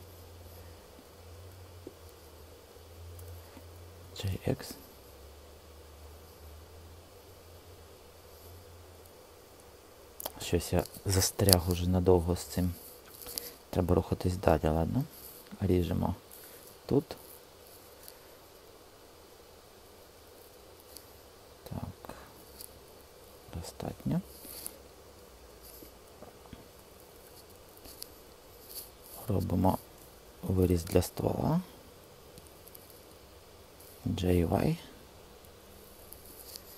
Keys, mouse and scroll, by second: 3.9 g, 4.3 x, 16.5 ctrl+r, 29.8 e, 30.5 Return, 33.9 g, 34.6 y, 36.3 click.